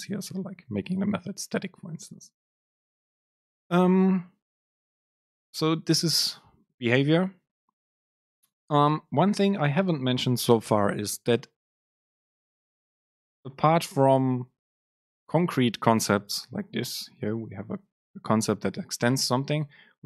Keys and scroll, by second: 1.5 Down, 3.8 BackSpace.